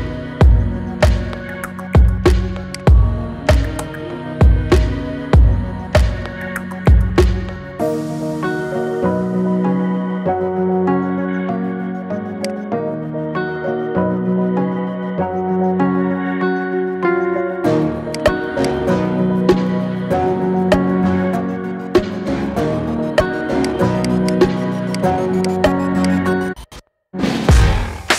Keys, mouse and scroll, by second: 0.2-1.2 middle drag, 1.2 scroll up 2, 1.5-2.5 shift+middle drag, 2.5 click, 2.9-3.2 scroll down 4, 3.2-4.6 middle drag, 4.6 scroll up 2, 4.9-7.1 middle drag, 7.1 KP_1, 8.2 KP_7, 10.1 s, 12.9-14.3 middle drag, 14.3-14.8 scroll down 4, 14.8-15.3 middle drag, 15.3-15.8 scroll up 4, 15.8-17.9 shift+middle drag, 17.9-18.8 drag, 18.8-19.2 scroll up 2, 19.2-20.7 middle drag, 20.7 Tab, 21.0-21.5 middle drag, 21.5-22.1 scroll up 3, 22.1-23.4 shift+middle drag, 23.4 click, 23.8 alt+shift+click, 24.0 alt+shift+click, 24.8 alt+shift+click, 25.2 alt+shift+click, 25.9 alt+shift+click, 26.3-26.9 scroll down 5, 26.9-27.9 middle drag, 27.9-28.1 scroll up 1.